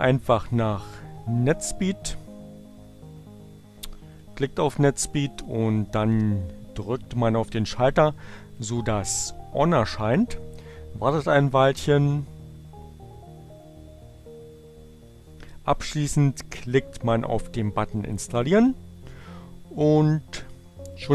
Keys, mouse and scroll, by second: 1.8 click, 4.0 click, 8.0 click, 18.2 click.